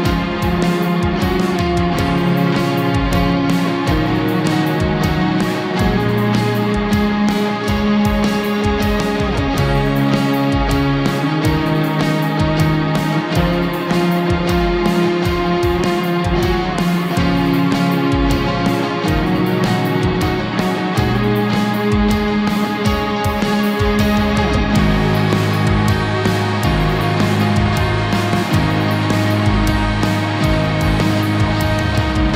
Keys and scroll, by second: 1.8 Up.